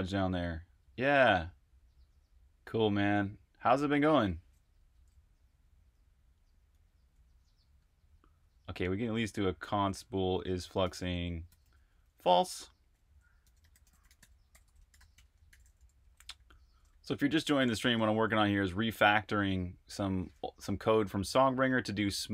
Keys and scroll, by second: 4.7 Escape, 4.8 typing, 6.4-16.8 typing, 18.0 j, 20.7-22.3 typing.